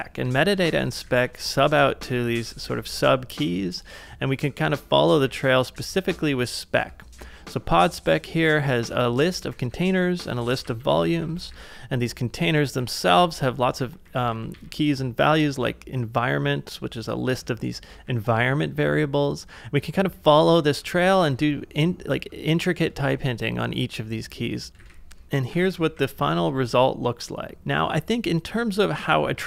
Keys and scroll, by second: 0.0-2.0 typing, 5.2 shift+8, 5.7 j, 7.2 shift+8, 8.5-15.0 typing, 18.1 shift+8, 20.5 j, 21.1 shift+v, 23.1 ctrl+c, 24.8-26.4 typing, 27.6 super+Tab.